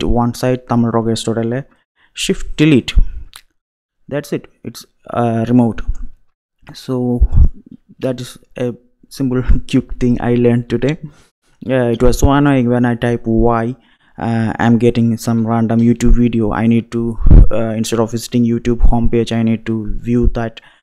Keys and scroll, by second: 2.5 shift+Delete, 8.0 Up, 14.7 super+a, 15.3 super+BackSpace, 15.8 typing.